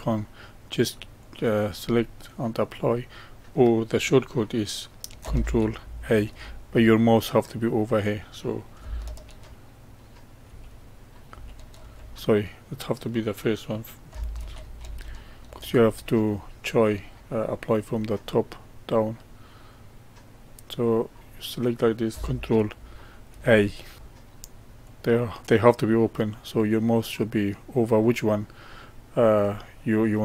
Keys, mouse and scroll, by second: 1.2-4.3 drag, 9.5 ctrl+a, 10.4 ctrl+a, 11.3 ctrl+a, 14.4 ctrl+z, 14.8 ctrl+z, 16.9-19.9 middle drag, 20.9-23.2 drag, 23.2 ctrl+a, 24.8-27.8 drag.